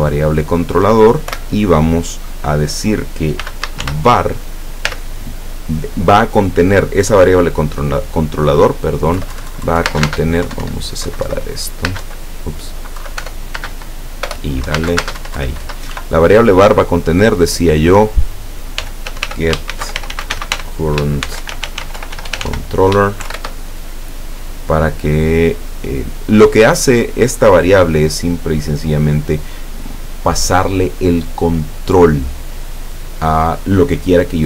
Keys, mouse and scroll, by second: 1.3 =, 3.5 v, 3.7 a, 3.9 r, 4.9 ., 9.2 Left, 10.0 space, 10.1 Right, 10.1 space, 10.5 Up, 11.1 Right, 11.9 space, 12.1 Right, 13.0 Left, 13.3-15.1 typing, 14.7 Right, 15.0 Right, 15.3 Down, 16.0 End, 18.8-23.4 typing.